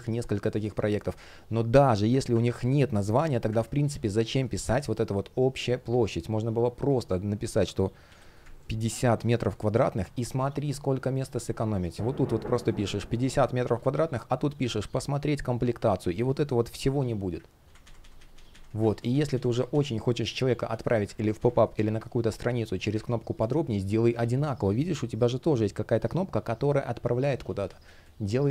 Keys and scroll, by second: 2.7 Delete, 10.0 shift+p, 17.3 super+z, 18.5 super+z, 19.9 space, 20.8 super+z, 22.6 super+z, 23.0 space, 27.1 super+z, 27.7 space.